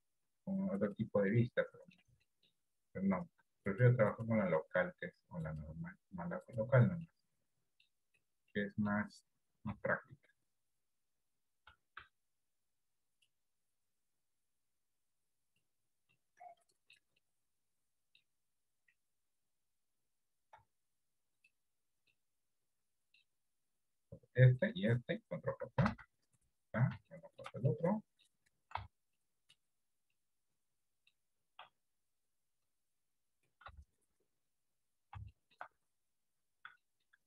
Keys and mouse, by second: 0.3 r, 1.3 middle click, 2.4 shift+middle click, 3.7 click, 4.1-6.9 drag, 7.1 middle click, 8.3 middle click, 9.8 r, 11.8 r, 14.2-15.7 drag, 16.3 middle click, 17.3 middle click, 20.7 r, 22.3-23.3 middle drag, 25.9 ctrl+j, 27.2 shift+middle click, 28.0 middle click, 29.2 shift+middle click, 30.2-31.2 middle drag, 33.8 g, 35.5 shift+middle click, 36.9 shift+middle click.